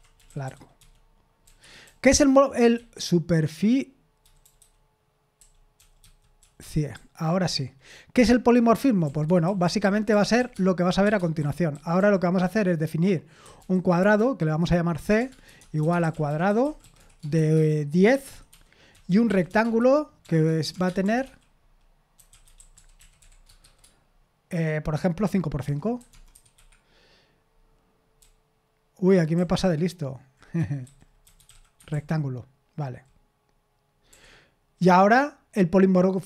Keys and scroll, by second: 2.6-4.9 typing, 20.5 typing.